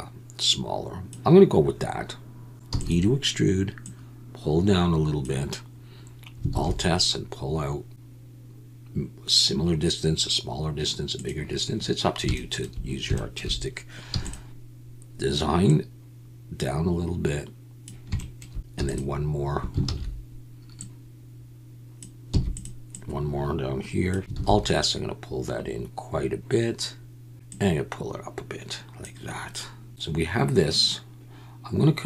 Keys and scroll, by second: 2.7 e, 6.5 alt+s, 14.1 e, 18.8 e, 19.9 ctrl+z, 22.3 e, 24.3 alt+s, 30.1 Tab.